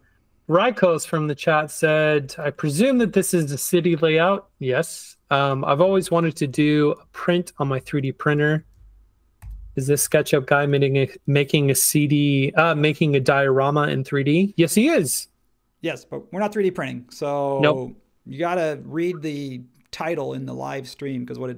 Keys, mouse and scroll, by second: 4.1 space, 9.4 super+e.